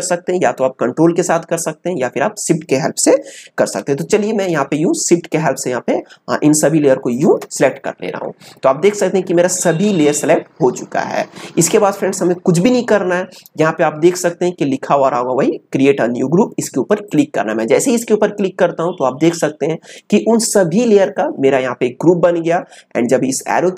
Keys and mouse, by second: 4.4 click, 17.0 click.